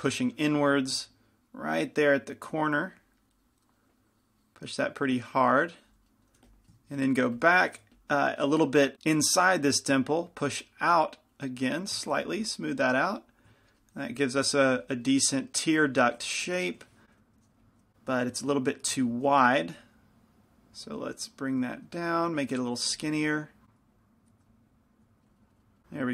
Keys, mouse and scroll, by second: 0.4 shift+f, 6.3-9.9 middle drag, 6.7 f, 7.5 f, 8.1 f, 9.9-15.0 drag, 13.8-15.0 middle drag, 15.0 click, 15.3 middle click, 17.2 p, 17.2 f, 19.1 f, 19.1 g, 19.9-22.1 drag, 21.9 right click, 22.2 click, 23.1 f, 24.0-25.3 drag.